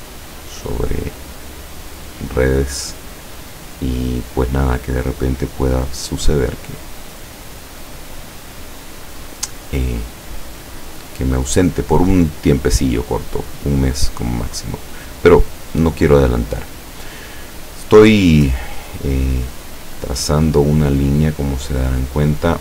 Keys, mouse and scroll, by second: 1.1 click, 3.4 click, 5.3 click, 15.4 click, 19.4 click.